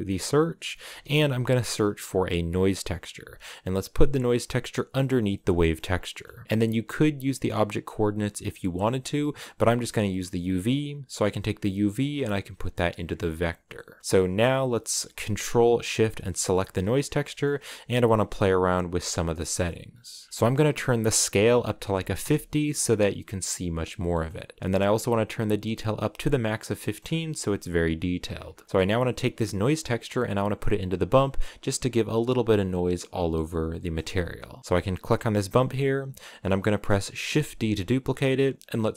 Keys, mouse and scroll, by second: 6.4 click, 7.0-8.2 drag, 13.0 click, 14.0-16.8 drag, 16.8 scroll down 2, 17.0-18.0 shift+middle drag, 18.0-19.4 scroll up 2, 20.3 5, 20.4-26.3 drag, 26.3 scroll down 2, 26.5 shift+middle click, 26.7-27.0 scroll up 5, 27.4 scroll down 5, 28.5 scroll down 5, 28.6-33.7 shift+middle drag, 33.7-37.1 drag, 37.1 shift+d.